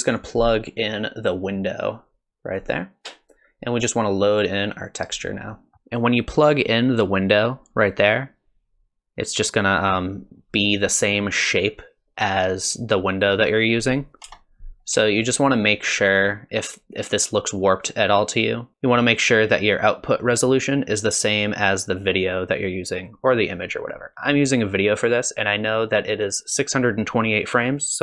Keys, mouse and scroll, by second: 1.2 click, 4.7 click, 5.5 middle click, 8.0 middle click, 14.2 KP_0, 18.7 click, 25.8 click.